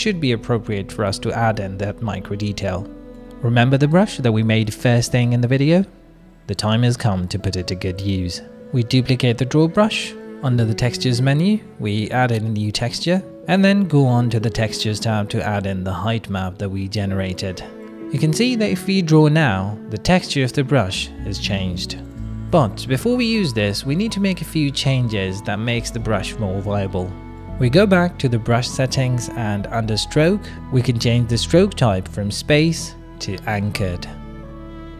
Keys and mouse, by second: 0.0-1.2 middle drag, 0.7 click, 0.7 right click, 1.4 shift+middle click, 1.7 ctrl+middle click, 2.0 click, 2.0 middle click, 2.0 right click, 4.5 middle click, 4.5-8.4 drag, 6.1 BackSpace, 6.2 BackSpace, 10.1 middle click, 10.9 click, 10.9 right click, 12.5 click, 13.5 click, 17.8 click, 22.8 click, 24.1 middle click, 26.0 ctrl+z, 26.5 middle click, 28.1 click, 29.0 middle click, 29.4 click, 30.0-32.6 middle drag, 32.7 click, 33.8 middle click, 34.4-34.9 drag.